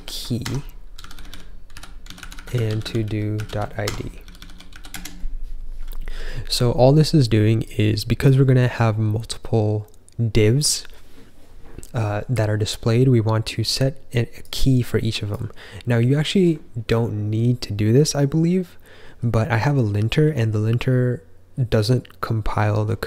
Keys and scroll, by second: 0.0-3.8 typing, 4.9 typing.